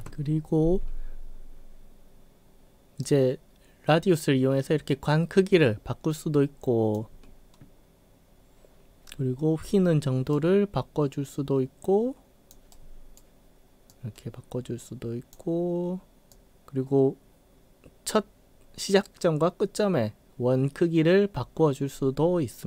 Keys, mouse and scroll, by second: 0.0 ctrl+z, 3.1-6.9 drag, 10.3-12.5 drag, 12.8 right click, 13.9-15.3 drag, 16.3-22.6 drag.